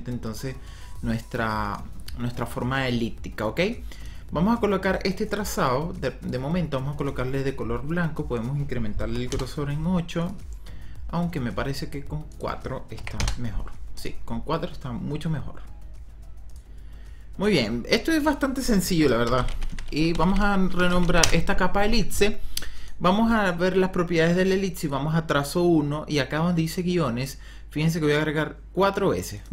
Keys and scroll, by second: 19.1 Return, 19.2-21.6 typing.